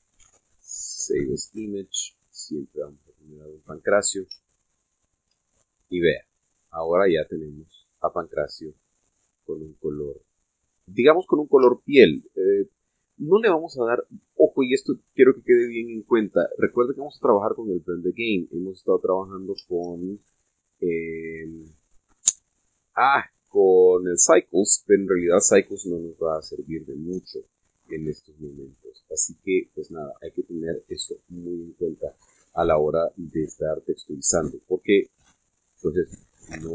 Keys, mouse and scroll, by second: 2.3 click, 3.7 click, 6.2 shift+z, 7.4-11.5 middle drag, 13.0 shift+z, 16.9 click, 19.2 click, 20.6-23.1 shift+drag, 20.8 shift+z, 28.1 p, 29.1 middle click, 30.8 p, 31.9 Escape, 32.9-33.2 scroll down 1, 33.4-33.9 scroll up 2, 34.2-34.9 shift+middle drag, 36.0 scroll down 1.